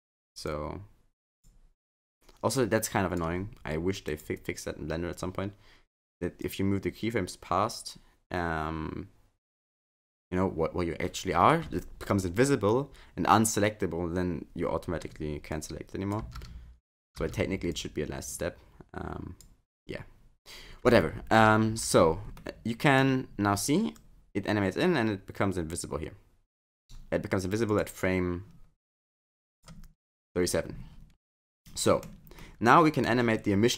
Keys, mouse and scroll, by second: 0.5 click, 2.6 click, 4.1 click, 6.4 click, 15.5 click, 16.2 space, 17.2 space, 17.7 click, 22.4 middle click, 24.0 click, 27.7 click, 29.2 click, 31.6 middle click, 32.4 middle click.